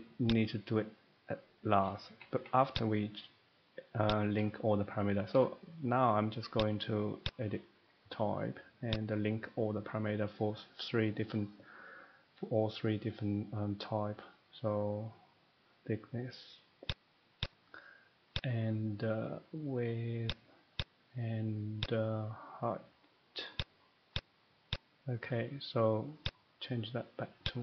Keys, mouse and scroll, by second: 0.3 click, 2.1 Escape, 2.3 Escape, 2.7 click, 4.1 click, 6.5 click, 7.2 click, 8.9 click, 16.8 click, 17.6 click, 18.3 click, 20.3 click, 20.8 click, 21.8 click, 23.5 click, 24.1 click, 24.7 click, 26.3 click, 27.4 click.